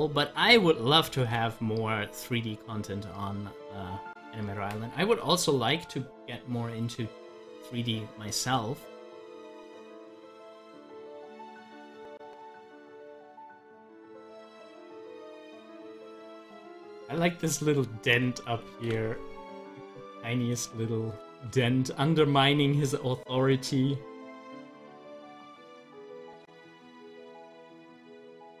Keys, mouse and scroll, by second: 1.2 ctrl+z, 2.2-6.8 drag, 8.6-11.6 middle drag, 11.6-17.6 drag, 17.6 click, 18.7 ctrl+z, 20.5-23.8 middle drag, 23.8-28.6 drag.